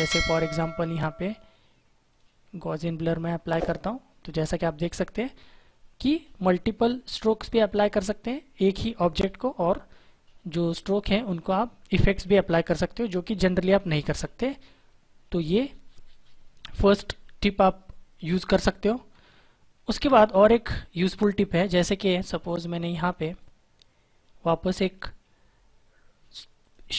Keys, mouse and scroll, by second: 2.0 click, 6.3 click, 22.4 click, 26.5 click.